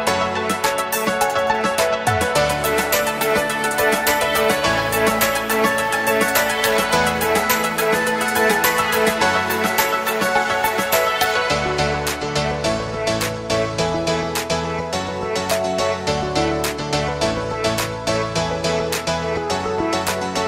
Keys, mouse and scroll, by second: 0.6 space, 0.8 click, 1.2-1.5 space, 4.4 space, 4.5-5.2 click, 5.0 space, 5.7-11.6 drag.